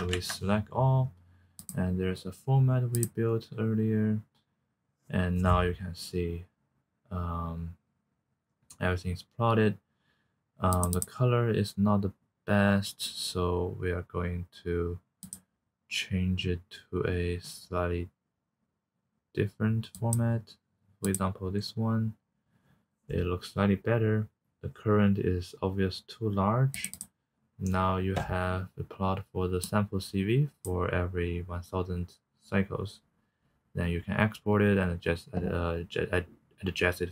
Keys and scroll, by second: 0.1 ctrl+a.